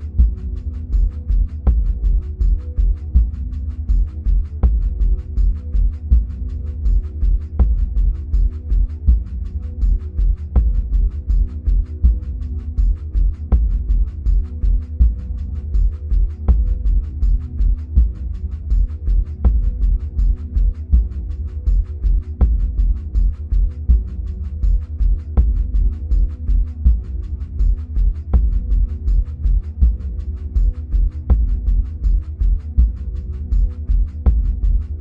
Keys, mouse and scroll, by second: 2.0 ctrl+z, 3.0 click, 6.3-10.1 middle drag, 10.1-15.2 drag, 19.9 click, 23.6-24.5 middle drag, 24.5-25.2 scroll down 2, 25.2-26.6 scroll up 2, 26.1-28.7 middle drag, 26.6-27.6 scroll down 2, 28.7-30.2 scroll up 2, 30.2 click, 34.7 drag.